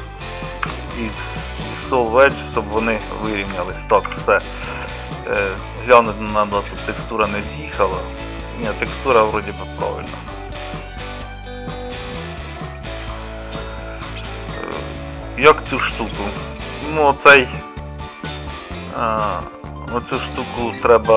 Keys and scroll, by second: 0.7 x, 4.1 Tab, 15.9 Tab.